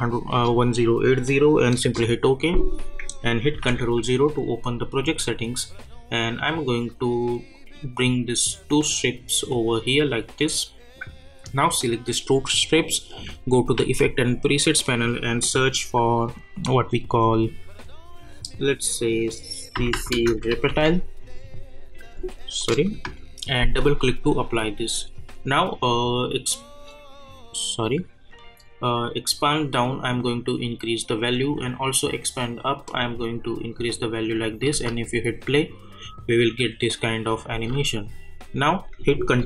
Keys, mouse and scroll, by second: 1.8 Return, 3.5 ctrl+0, 7.5-10.9 drag, 13.8 ctrl+a, 19.5-21.3 typing, 22.6 click, 27.8-34.7 drag, 34.7 space, 37.9 space.